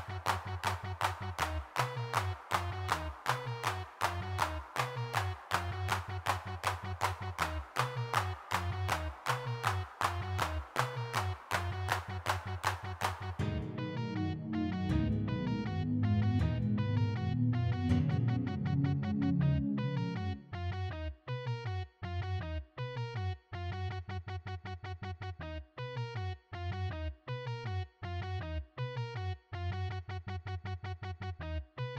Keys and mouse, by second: 1.0 middle click, 1.2 m, 1.5 f, 4.2 ctrl+i, 5.1 g, 5.2 f, 8.6-11.1 drag, 11.8 shift+c, 12.2 f, 13.2-19.5 middle drag, 20.8 middle click, 21.9 3, 22.0 f, 22.4 middle click, 23.9 f, 24.2-25.3 drag, 27.8 middle click, 29.1 middle click, 30.4 middle click, 30.8 middle click, 31.3 f, 31.6 x.